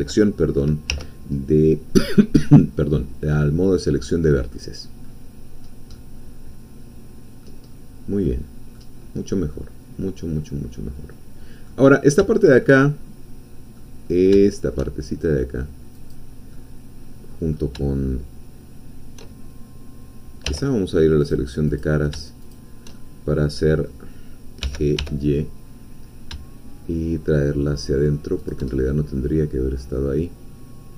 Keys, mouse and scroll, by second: 0.9 2, 1.5 middle click, 2.4-4.7 drag, 4.9-5.3 scroll up 2, 5.6 scroll up 2, 5.9-7.7 middle drag, 7.7-8.2 scroll down 1, 8.2 middle click, 9.5-11.8 middle drag, 11.9 scroll up 1, 12.3-13.9 shift+middle drag, 14.0-14.4 scroll up 2, 14.5 shift+middle click, 16.1 click, 16.5-17.7 middle drag, 20.5 3, 21.3 click, 22.5 shift+click, 23.0-24.6 shift+middle drag, 24.6 g, 25.1 y, 28.4 shift+click, 28.7-30.9 shift+middle drag.